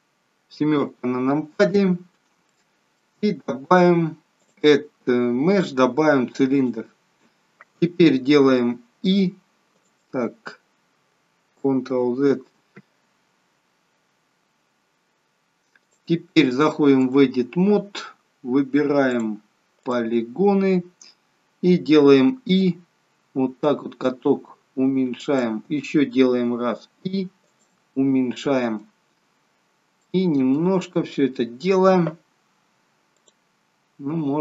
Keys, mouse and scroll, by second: 0.5 KP_7, 2.5 shift+middle click, 4.3 click, 9.4 i, 11.9 ctrl+z, 15.7 click, 19.1 click, 20.0 click, 20.5 scroll up 3, 22.3 i, 26.5 i, 27.9 middle click, 29.1 scroll down 2, 29.9 scroll down 2, 30.1 middle click, 33.2 click.